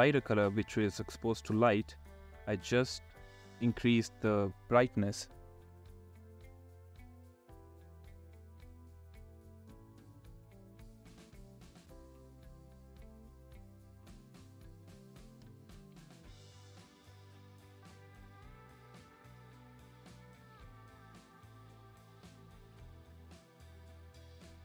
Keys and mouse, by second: 0.0 click, 4.1 ], 4.2 ], 8.4-9.7 drag, 11.0 ], 11.3 ], 11.4 ], 13.8 ], 13.9 ], 14.0 ], 15.5 click, 16.5-19.0 typing, 20.0 click, 20.4 click, 24.2 ], 24.5 ].